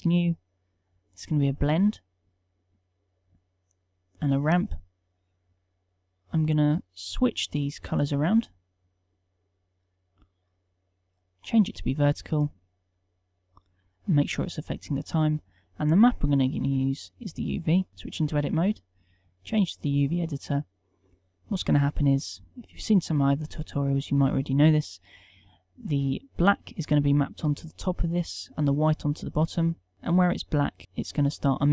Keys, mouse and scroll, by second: 17.9 Tab.